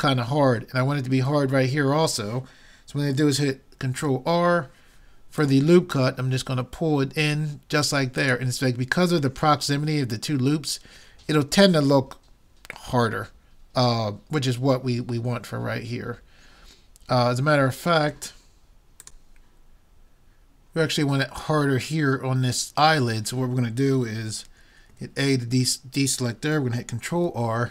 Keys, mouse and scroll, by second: 4.0 ctrl+r, 24.9 a, 27.2 ctrl+r.